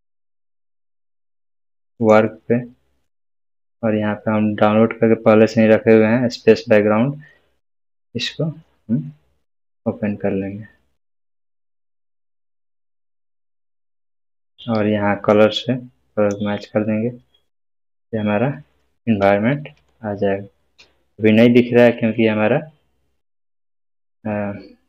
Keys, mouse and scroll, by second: 2.0 click, 12.8-14.3 scroll down 1, 15.3-16.5 drag, 17.8-19.6 scroll up 1, 19.8-20.7 shift+middle drag.